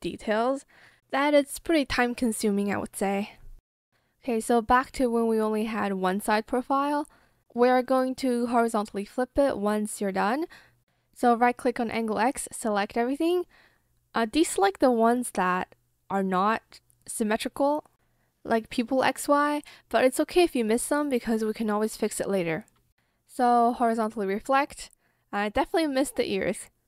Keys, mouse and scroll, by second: 15.1 ctrl+click, 15.8 ctrl+click, 19.6 ctrl+click.